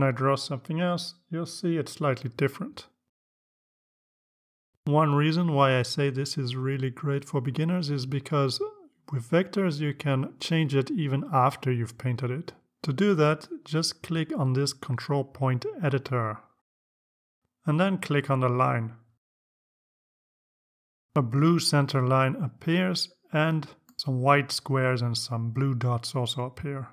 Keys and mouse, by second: 2.2-3.8 drag, 18.0 click, 20.2 click, 25.3-26.3 drag.